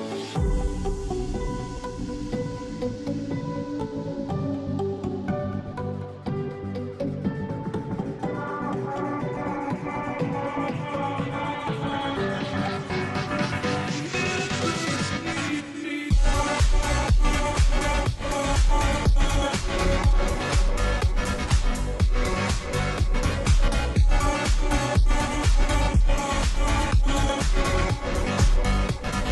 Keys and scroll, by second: 0.0-29.3 typing, 15.5 ctrl+j.